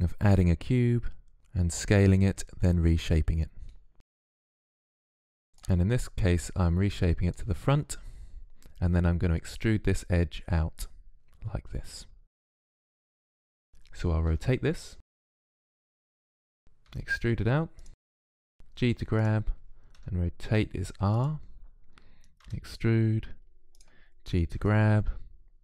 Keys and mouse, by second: 1.4 KP_3, 2.1 z, 2.5 click, 3.3 Tab, 5.7 click, 7.7 click, 14.1 r, 16.7 e, 18.3 g, 19.7 r, 22.2 e, 24.3 g.